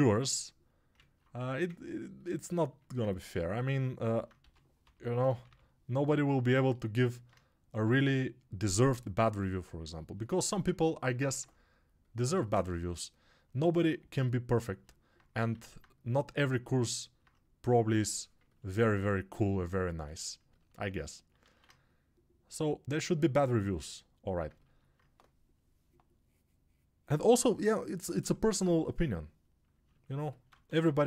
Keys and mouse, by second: 1.6-4.2 ctrl+right drag, 4.2-24.4 drag, 30.4 1.